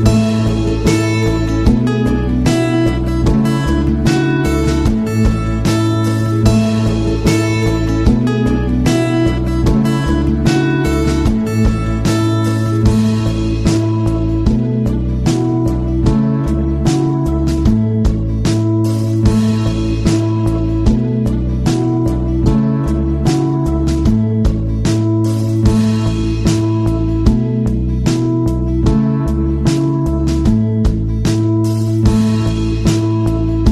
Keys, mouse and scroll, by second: 3.1 click, 13.4 click, 15.5 click, 17.7-20.4 drag, 20.4 Tab, 21.5 click, 24.8-25.2 alt+scroll up 1, 25.3 click, 25.9 space, 26.0 click, 26.4 space, 27.1-31.1 drag.